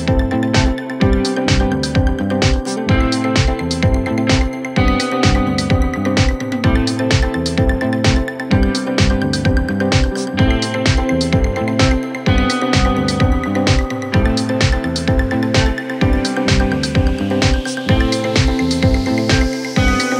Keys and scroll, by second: 8.5 F3, 12.2 c, 12.5 Escape, 16.1 ctrl+z, 16.4 Escape.